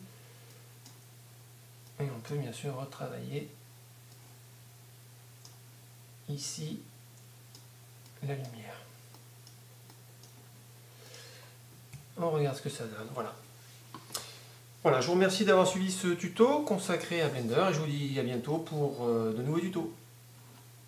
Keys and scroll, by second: 11.9 F11.